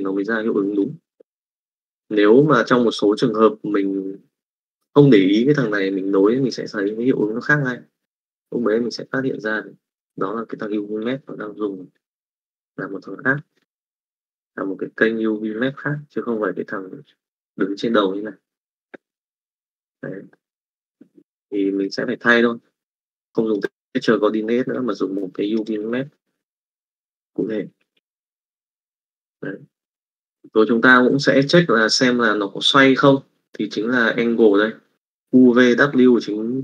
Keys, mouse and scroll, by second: 0.7 click, 9.4-10.5 drag, 15.3 click, 19.6 click, 20.3 middle click, 22.0-23.2 drag, 24.5 click, 25.3 click, 26.3 Delete, 27.7 middle click, 28.1 middle click, 29.7 click.